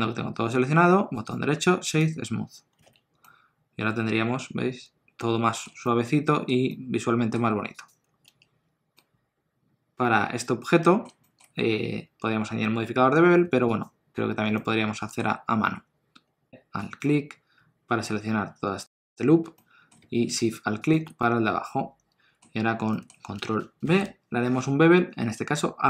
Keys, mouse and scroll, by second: 1.1 right click, 2.9 alt+a, 3.2 middle click, 5.8 ctrl+middle click, 6.6 middle click, 7.7 click, 8.2 Tab, 8.9 middle click, 11.2 shift+middle click, 11.7 scroll up 1, 12.0 2, 13.7 alt+click, 14.5 middle click, 16.5 Tab, 16.5 2, 16.7 alt+click, 18.7 middle click, 21.2 middle click, 22.5 scroll up 1, 22.8 middle click, 24.1 ctrl+b.